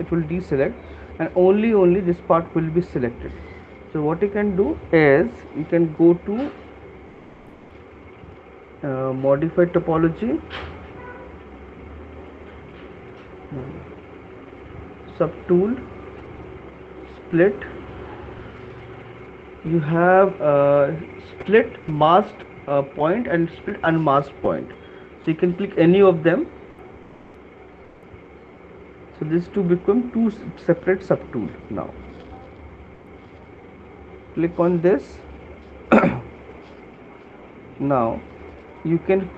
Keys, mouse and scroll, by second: 1.3 right click, 3.5 shift+click, 9.3 click, 11.6 click, 15.4 click, 17.5 click, 28.1 click, 33.9 right click, 33.9 alt+click, 34.5 alt+click.